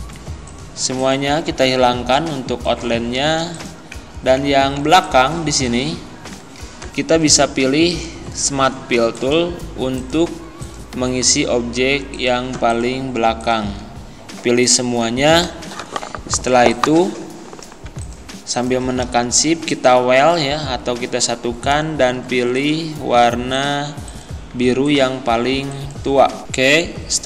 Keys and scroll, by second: 4.8 z.